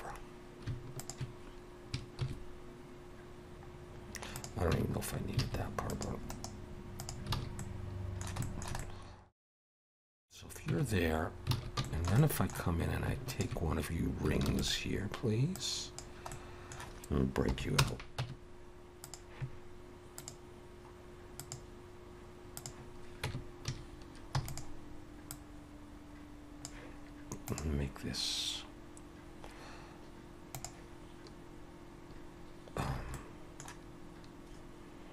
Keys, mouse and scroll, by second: 0.1 scroll up 1, 1.0 alt+shift+click, 2.2 ctrl+b, 4.7 Tab, 5.0 scroll down 2, 5.4 alt+a, 5.9 click, 6.3 right click, 7.3 alt+a, 7.6 middle click, 8.4 shift+middle click, 8.8 middle click, 9.7 click, 10.7 Tab, 11.0 scroll up 1, 11.5 scroll up 2, 11.5 alt+a, 11.8 shift+middle click, 12.2 middle click, 13.3 alt+shift+click, 14.5 shift+d, 15.6 click, 17.5 middle click, 17.5 p, 18.2 Tab, 19.0 click, 24.4 Tab, 24.4 a, 24.4 e, 25.3 click, 33.1 a, 33.1 middle click.